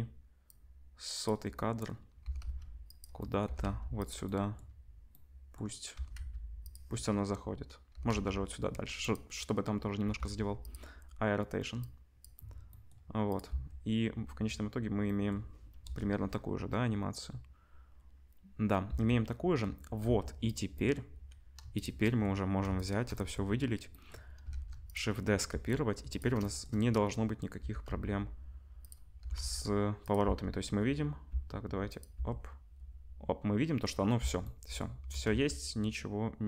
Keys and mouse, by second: 0.5-3.0 drag, 2.2 r, 3.0-11.8 middle drag, 3.4 r, 5.9 r, 7.9 r, 10.0 i, 11.8-13.3 drag, 13.3-20.4 middle drag, 13.8 space, 15.9 KP_0, 19.8 ctrl+space, 20.0 ctrl+s, 20.4 click, 20.5-21.7 middle drag, 21.7 shift+click, 21.8-22.7 shift+middle drag, 22.7 shift+click, 22.8-24.4 shift+middle drag, 24.4 shift+click, 24.5 shift+d, 24.6-31.8 middle drag, 25.5 r, 27.5 r, 29.2 r, 30.2 space, 31.3 space, 31.8-36.4 drag, 35.0 r.